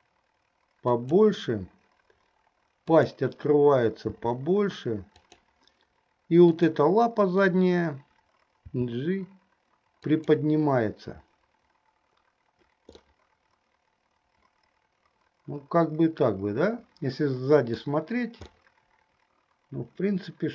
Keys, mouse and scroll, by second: 4.3 r, 6.8 click, 8.7 g, 13.2-18.1 middle drag, 18.6 scroll up 1, 18.8-20.5 middle drag.